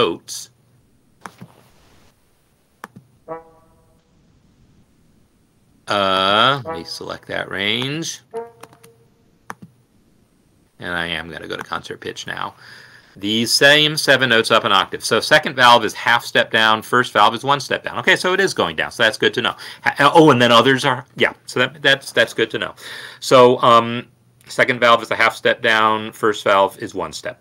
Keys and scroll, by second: 9.7 ctrl+c, 11.2 ctrl+v, 14.6 ctrl+Up.